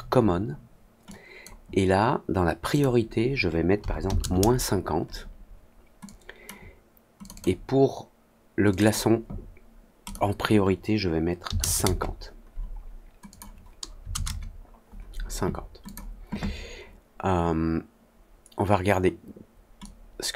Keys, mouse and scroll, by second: 1.0-1.3 drag, 2.6 click, 6.0-6.4 drag, 7.1 click, 7.3 click, 8.6 click, 8.8 click, 10.0 click, 13.2 click, 15.8 click, 19.7-20.3 drag.